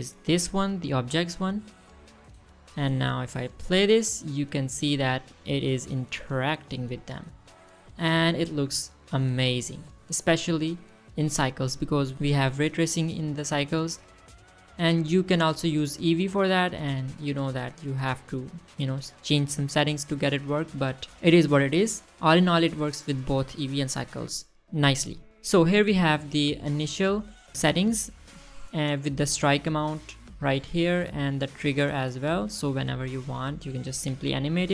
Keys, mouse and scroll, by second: 4.3 click, 4.8 space, 5.8 space, 6.7-7.3 middle drag, 7.4-8.3 scroll up 2, 8.3-8.7 middle drag, 9.7-10.1 shift+middle drag, 10.5-11.0 scroll up 2, 10.5 middle drag, 11.1 shift+middle drag, 11.2-12.2 scroll down 1, 12.3 click, 20.9 click, 21.5 middle click, 26.5 middle click, 30.4-32.6 drag, 33.0 click, 33.4 click, 34.6-34.7 right drag.